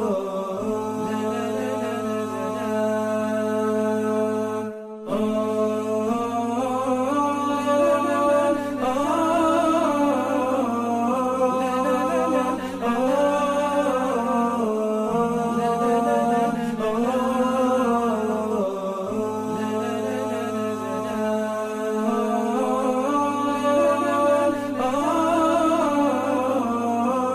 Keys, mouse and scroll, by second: 0.3 double click, 9.4-9.8 typing, 13.1 typing, 21.1 double click, 22.5-23.6 typing, 24.0 Return.